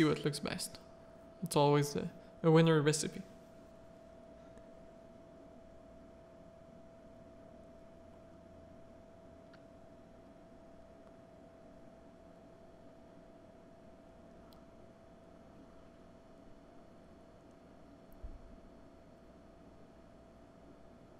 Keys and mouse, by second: 0.2 shift+middle click, 1.6-4.2 middle drag, 5.2 click, 5.5 z, 5.7 middle click, 6.1 shift+middle click, 6.6 Tab, 6.8 middle click, 7.1 z, 7.3 a, 7.6 middle click, 8.0 1, 8.5-9.9 shift+middle drag, 9.9 z, 12.8-15.3 drag, 15.7 click, 16.4 middle click, 17.0 r, 20.4 middle click.